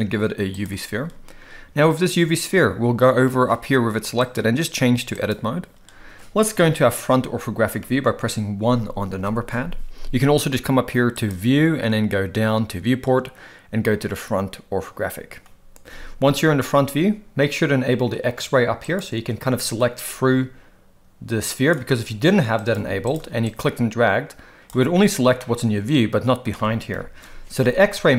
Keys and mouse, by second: 4.3-5.3 drag, 9.2 KP_1, 11.1-15.5 drag, 18.9 click, 20.0-21.7 drag, 23.5-24.6 drag, 25.4-26.4 middle drag, 26.9 KP_1.